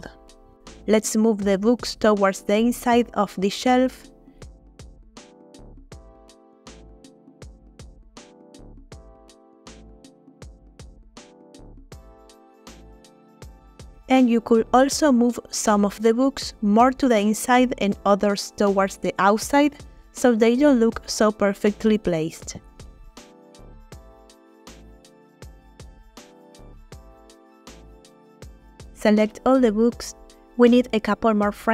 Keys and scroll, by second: 4.6 g, 5.0 y, 9.4 g, 9.6 x, 11.2 g, 11.4 y, 12.5 g, 12.7 y, 18.6 g, 18.8 y, 21.9 g, 22.3 y, 25.0 g, 25.4 y, 27.9 g.